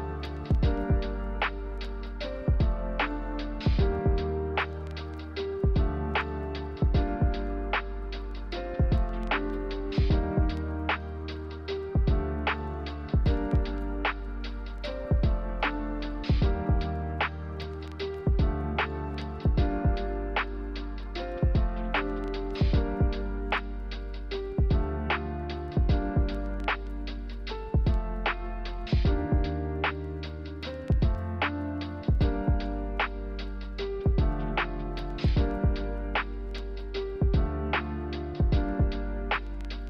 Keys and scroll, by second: 4.9 b, 5.7 Delete, 6.6 n, 11.0-15.3 typing, 21.9 a, 27.0 a, 31.6 a, 37.4 z.